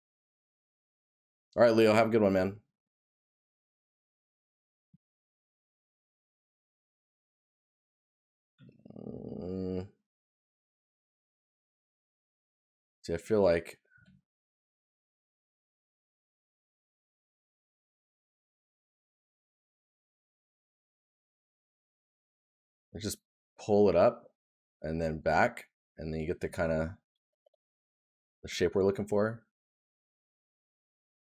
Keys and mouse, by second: 4.9 right click.